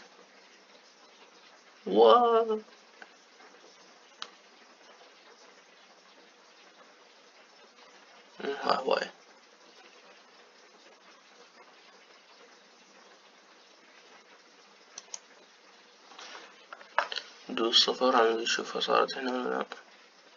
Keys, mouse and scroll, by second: 18.2 KP_0.